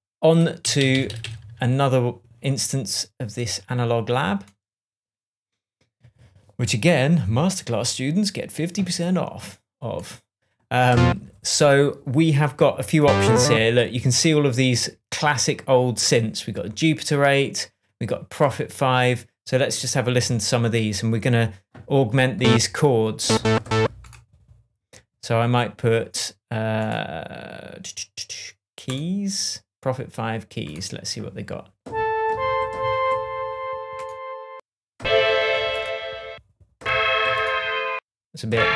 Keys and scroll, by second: 0.6 Up.